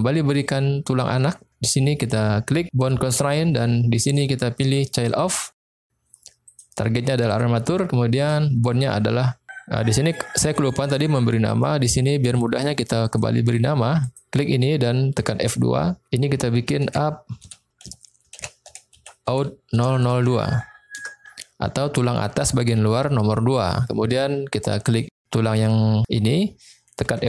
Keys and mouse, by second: 1.0 middle click, 3.2 click, 4.0-5.2 drag, 6.5 click, 8.2-10.6 drag, 11.1-11.6 middle drag, 12.0-12.4 middle drag, 12.9 click, 14.0 click, 15.1 F2, 19.9 0, 24.9 click, 27.1 F2.